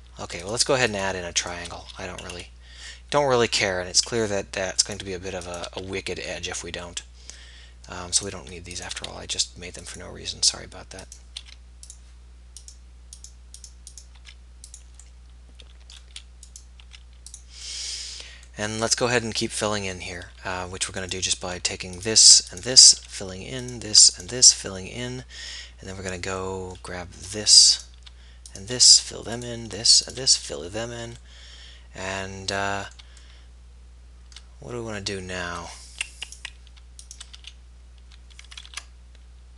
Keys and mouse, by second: 1.2 right click, 2.4 f, 3.7-5.6 middle drag, 6.0 f, 7.0 middle click, 7.7 middle click, 8.3 click, 9.1 x, 11.4 x, 14.3 x, 15.5 middle click, 16.8 x, 17.0 click, 23.4 f, 24.6 f, 25.8-26.8 middle drag, 26.8 click, 29.2 f, 30.4 f, 36.4-37.7 right drag, 37.7 f, 38.9 ctrl+r.